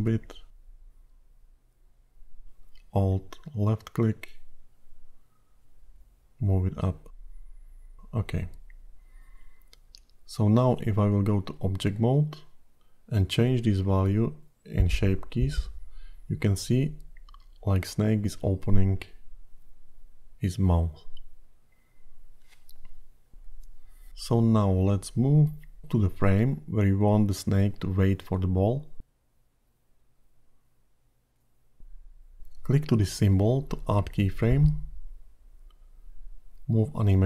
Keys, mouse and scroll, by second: 0.8 middle click, 4.9 alt+click, 6.0 g, 9.3 Tab, 10.0-12.3 scroll down 12, 13.3-15.4 scroll up 12, 15.4 click, 22.9-23.7 scroll down 12, 23.7 middle click, 24.1 scroll down 1, 24.5-25.6 scroll up 3, 26.0 click, 26.6 click, 30.7 middle click, 31.4-33.6 scroll up 8, 33.6 click.